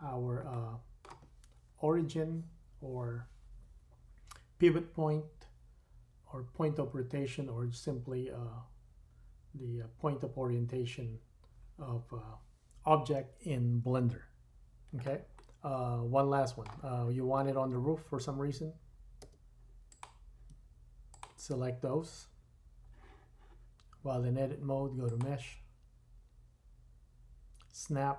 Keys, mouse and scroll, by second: 2.6-16.3 middle drag, 19.2 Tab, 19.8 click, 21.1 shift+click, 24.2 middle click, 25.0-28.1 drag.